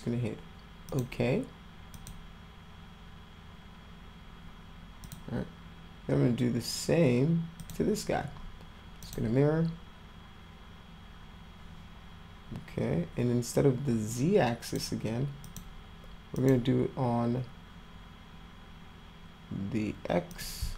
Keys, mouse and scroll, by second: 0.9 click, 1.9 click, 3.1 scroll up 2, 5.0 click, 7.6 click, 9.0 click, 14.1 click, 15.4 click, 16.3 click, 20.3 click.